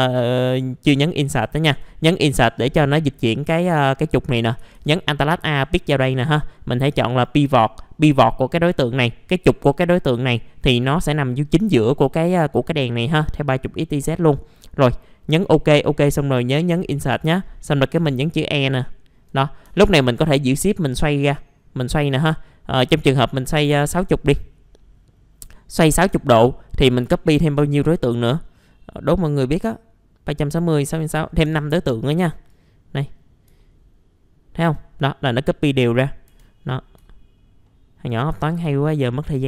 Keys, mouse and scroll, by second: 1.7 Insert, 4.7 alt+a, 5.4 click, 16.7 Insert, 18.0 e, 18.8 alt+middle click, 20.1-25.8 shift+drag, 27.0 click, 31.4 5, 32.3 click, 33.2 scroll down 1, 33.6 alt+middle click, 35.7-36.3 scroll up 1, 36.3 F4, 36.6-37.0 scroll down 1, 37.0 alt+middle click, 37.6 alt+middle click, 38.3 alt+f, 38.5 typing, 38.8 scroll down 1, 39.2 middle click.